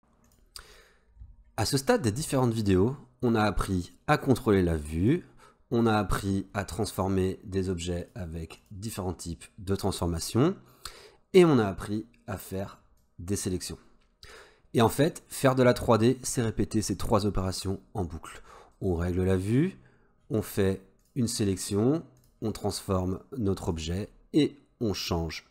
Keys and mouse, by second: 3.3-5.3 middle drag, 7.0 click, 8.6 click, 9.9-12.7 drag, 13.2-13.7 drag, 18.8-19.4 middle drag, 19.4 click, 21.0 click, 23.2 click, 24.5-25.5 middle drag.